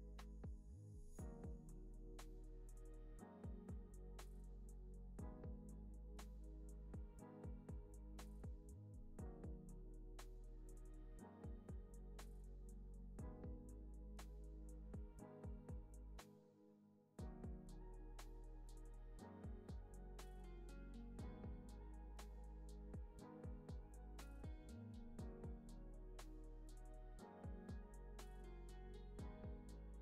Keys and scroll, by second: 2.7 Down, 3.4 Right, 6.7-8.2 typing, 9.1 Down, 10.9 Right, 13.5 Up, 16.3-17.5 typing, 17.8 Right, 18.8 Up, 19.1 Right, 20.8 Right, 21.1 Up, 23.6-24.9 typing, 25.8 Up, 28.2 Up, 28.7 Right, 29.5 Right, 29.9 Up.